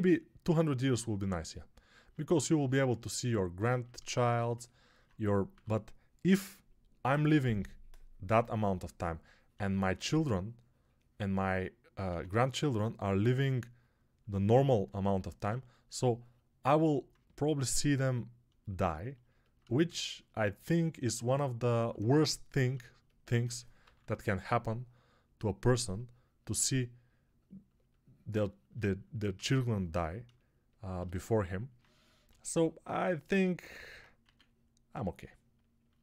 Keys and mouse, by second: 11.9 x, 23.7 p, 32.1 g, 34.1 1.